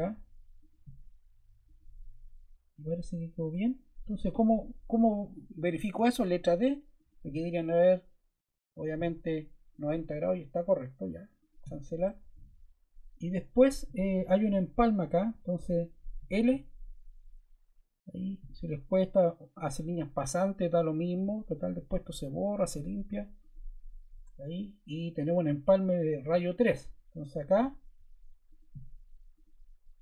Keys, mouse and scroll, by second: 5.9 d, 27.3 0, 28.4 0.